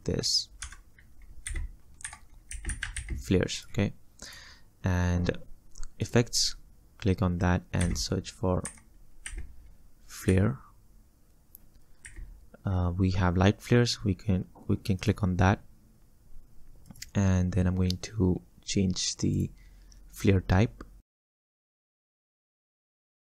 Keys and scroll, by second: 0.7 F2, 1.8-3.5 typing, 7.9 f, 10.3 r, 21.7 Down, 21.8 Down, 21.9 Down, 22.0 Down, 22.1 Down, 22.7 Down, 22.8 Down, 23.1 Down, 23.2 Down.